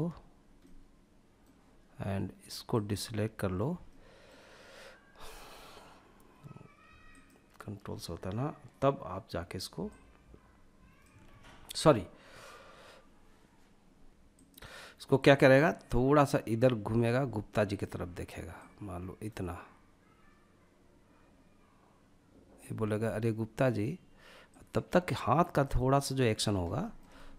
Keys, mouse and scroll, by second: 1.8 shift+click, 3.0 middle click, 6.2 ctrl+click, 9.0 click, 10.5 ctrl+z, 13.7 click, 14.8 click, 16.9 click, 17.8 click, 23.7 click, 25.0-25.4 middle drag, 25.6-26.2 scroll down 3, 26.0 shift+middle click, 26.3-27.3 middle drag.